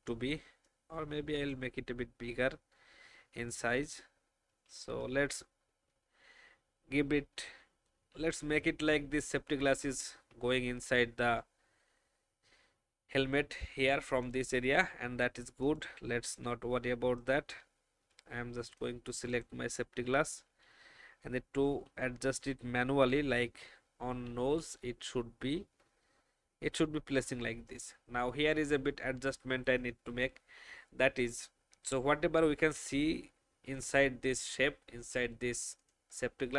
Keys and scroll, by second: 4.5 alt+shift+Up, 10.3 alt+shift+Down, 20.6 shift+Right, 21.5 Up, 21.7 Up, 21.9 Up, 22.3 Up, 24.3 Right, 24.5 Right, 24.9 Down.